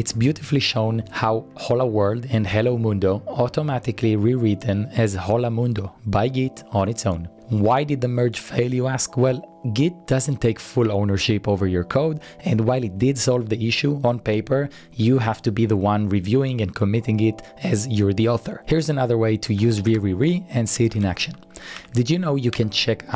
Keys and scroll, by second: 0.0-0.4 typing, 4.9 typing, 7.2-7.9 typing, 12.7-13.4 typing, 18.4-23.1 typing, 21.8 Tab.